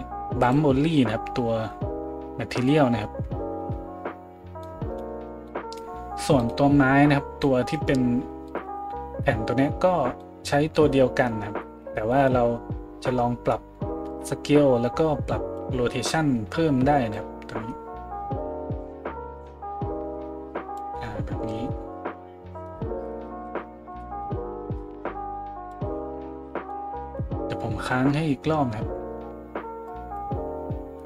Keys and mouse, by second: 0.4-31.0 drag, 6.4 middle click, 6.4 right click, 8.5 middle click, 8.5 right click.